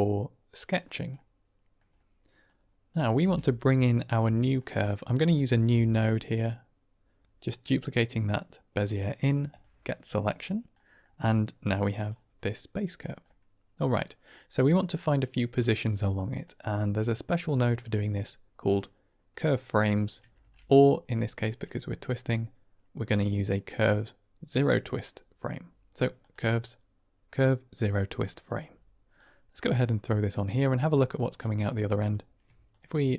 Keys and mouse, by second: 1.2 middle click, 2.3-2.9 drag, 3.1 g, 4.6 middle click, 5.3 click, 5.6 shift+d, 10.6 middle click, 11.8 click, 13.3 middle click, 14.3-16.1 drag, 16.5 middle click, 17.6 middle click, 20.3 shift+a, 30.1-30.5 drag, 30.9 middle click.